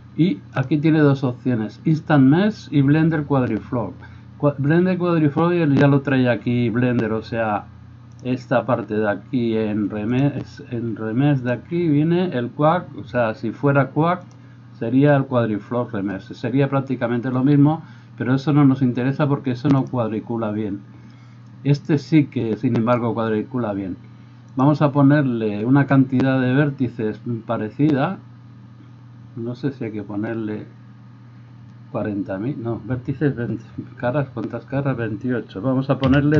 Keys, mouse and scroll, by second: 0.5-8.3 drag, 8.3-10.1 middle drag, 10.1-14.4 drag, 14.4-20.0 middle drag, 20.0-36.3 drag.